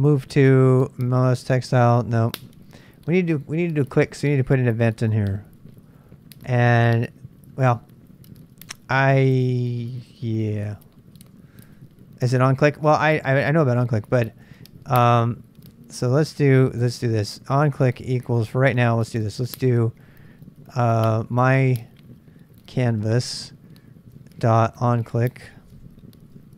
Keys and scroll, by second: 9.8-16.8 typing, 19.1-26.5 typing.